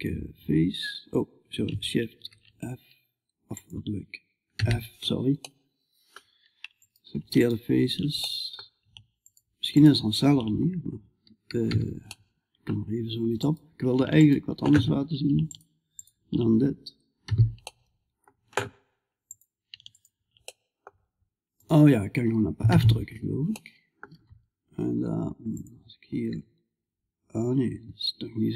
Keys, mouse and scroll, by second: 1.6 ctrl+f, 4.9-6.2 middle drag, 6.2-7.7 right drag, 7.7-13.6 middle drag, 13.6-17.3 right drag, 17.3-18.7 middle drag, 18.7-23.0 right drag, 20.1-23.0 drag, 23.0-25.7 middle drag, 25.7-28.4 right drag, 25.7 g.